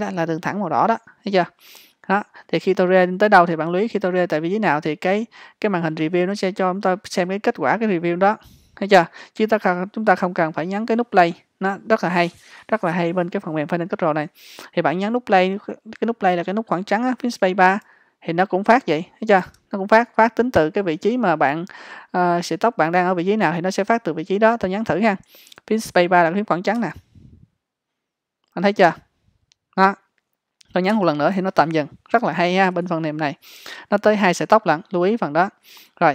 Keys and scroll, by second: 17.9 space.